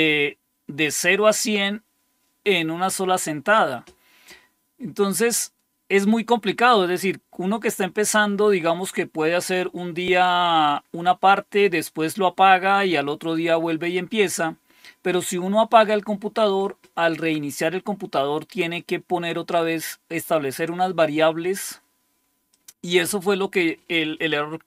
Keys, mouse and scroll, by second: 22.4 click, 23.1 click.